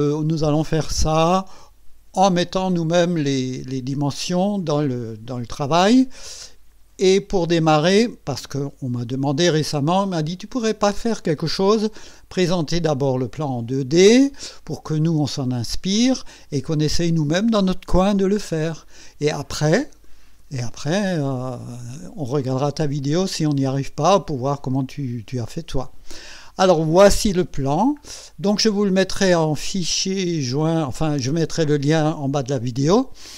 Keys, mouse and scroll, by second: 10.0 click, 11.4-13.9 drag, 14.7 click, 27.7-28.3 scroll up 3, 29.3-31.0 drag, 32.7 scroll up 1.